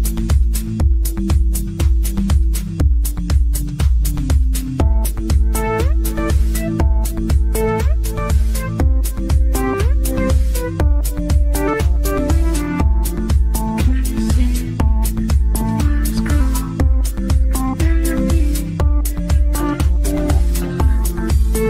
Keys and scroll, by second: 7.4 ctrl+z, 14.9 Delete, 16.8 ctrl+shift+a, 19.1 g.